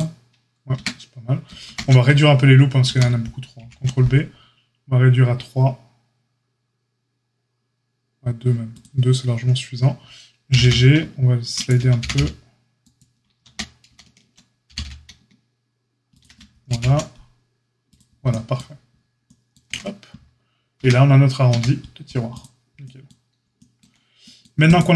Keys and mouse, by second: 0.7 Tab, 1.6 ctrl+z, 2.8 ctrl+z, 3.5 ctrl+b, 10.4 g, 11.9 g, 13.4 ctrl+z, 13.8 ctrl+z, 14.6 g, 16.6 ctrl+b, 20.7 Tab, 21.4 a, 24.6 click.